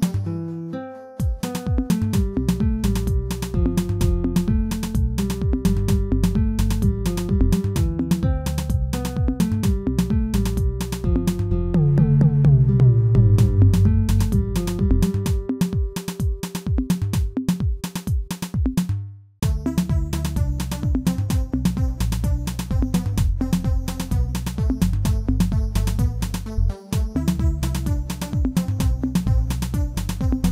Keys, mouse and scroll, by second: 2.5-2.8 scroll down 2, 2.8 shift+middle click, 3.3 e, 6.1 shift+middle click, 7.0 e, 11.9 scroll down 2, 12.2 shift+middle click, 13.1-14.3 scroll down 4, 14.3 g, 18.0 shift+middle click, 18.5-19.1 scroll up 1, 19.1 shift+middle click, 19.5-19.9 scroll up 2, 19.9 shift+middle click, 20.6 e, 23.2 shift+middle click, 23.7 e.